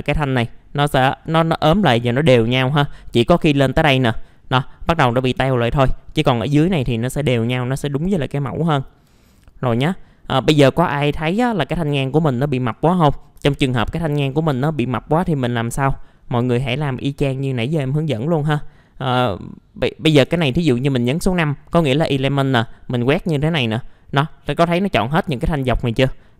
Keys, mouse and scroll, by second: 2.7-4.2 middle drag, 5.8 scroll down 1, 6.2-7.2 middle drag, 9.2 alt+middle click, 10.0-10.4 scroll up 1, 10.4 middle click, 10.6-11.2 scroll down 1, 12.7 click, 13.4 typing, 14.2 middle click, 14.3 scroll down 1, 14.5 F4, 14.9-16.2 middle drag, 16.2-16.6 scroll up 1, 18.1 middle click, 19.5-19.9 scroll down 1, 20.2 typing, 22.6 click, 23.5-24.9 scroll down 1.